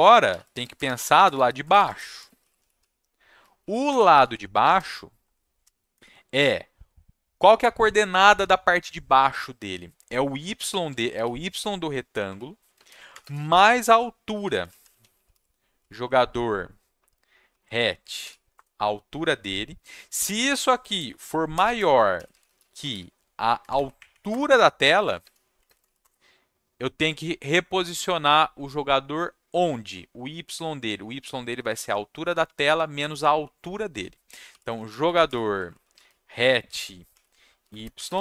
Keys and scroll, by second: 0.0-5.9 typing, 10.5-18.7 typing, 20.8-23.3 typing, 23.6 Down, 23.7 Down, 23.9 Up, 24.1 Up, 24.3 Return, 24.7-25.6 typing, 26.0 Return, 34.2-38.2 typing.